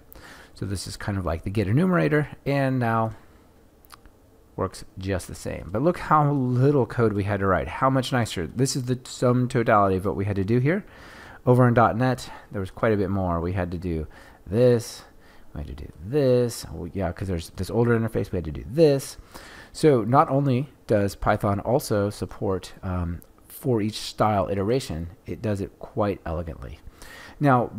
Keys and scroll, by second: 2.9 shift+F10.